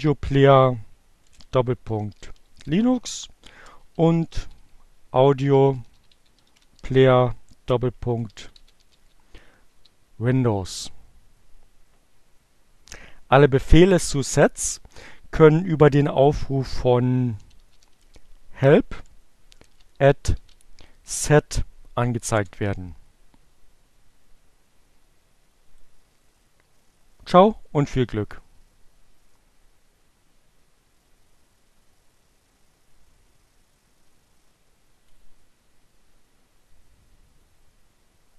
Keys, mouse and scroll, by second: 0.0-8.6 typing, 14.9-15.8 typing, 17.0-17.8 typing, 19.1 alt+q, 19.2 alt+s, 19.3 alt+e, 19.8 alt+t, 21.9 Return, 25.1-35.3 drag.